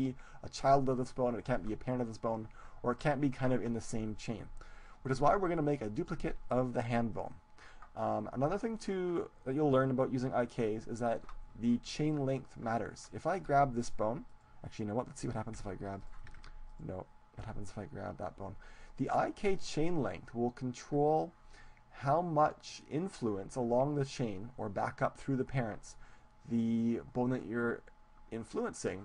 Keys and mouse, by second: 6.1-9.4 right drag, 13.5-16.5 right drag, 15.9 g, 16.1 click, 16.5 ctrl+z, 17.8 g, 18.1 click.